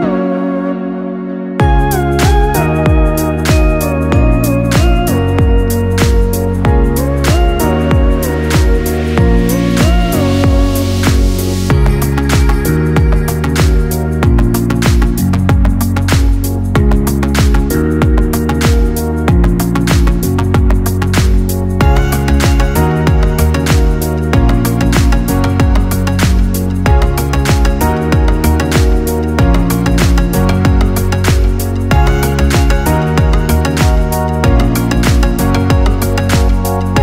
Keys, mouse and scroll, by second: 0.3-1.0 scroll down 2, 1.1 click, 4.2 click, 6.6 scroll up 1, 7.0 shift+middle click, 7.4-7.8 scroll up 1, 7.8 shift+middle click, 8.4 Tab, 9.1 right click, 9.5 g, 11.1 z, 12.3 shift+middle click, 12.7-13.2 scroll up 2, 13.2 g, 15.0 Tab, 15.4 right click, 16.2 Tab, 17.6 z, 21.0 Tab, 21.1 Tab, 22.1 z, 24.5 Tab, 25.1 right click, 26.2 z, 27.3 g, 28.4 Tab, 29.0 z, 30.0 right click, 30.6 g, 34.2-34.6 scroll down 3, 34.6 shift+middle click, 35.1 e, 36.8 shift+middle click.